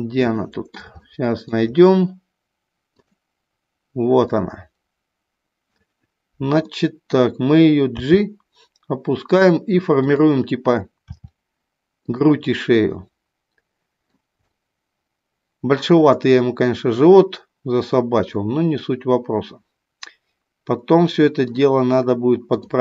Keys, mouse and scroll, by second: 0.0 middle click, 1.1 shift+middle click, 2.8 click, 4.2-5.8 middle drag, 6.7 middle click, 8.0 g, 11.0 r, 12.7-14.1 middle drag, 14.5-21.6 middle drag.